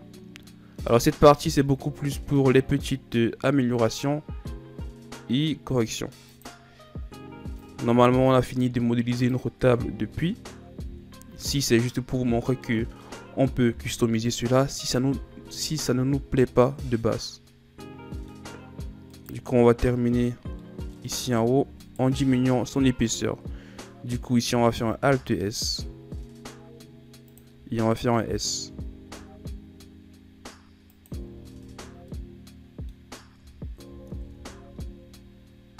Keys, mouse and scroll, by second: 1.7 alt+s, 7.6 click, 9.6 Tab, 10.9 KP_1, 12.2-12.7 scroll down 2, 12.7-13.7 middle drag, 13.7 KP_1, 15.0 a, 16.2-16.7 shift+scroll up 5, 16.7-17.0 scroll down 2, 17.0-18.5 middle drag, 18.5-19.1 scroll up 2, 19.1 right click, 20.7 middle click, 21.2 Tab, 21.8 right click, 22.3 l, 24.7 alt+s, 28.7 s, 31.3 Tab, 31.7 a, 31.9 scroll down 2, 32.1 middle click, 33.1 scroll up 4, 33.4 Tab, 34.1 alt+s.